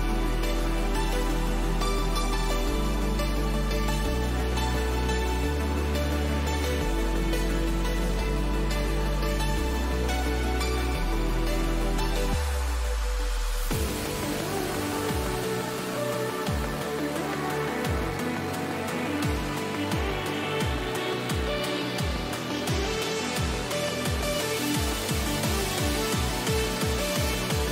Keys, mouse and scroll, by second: 0.3-2.1 middle drag, 3.7-6.7 middle drag, 8.3 Escape, 16.5-18.3 middle drag, 24.8-26.7 middle drag, 26.7-27.7 middle drag.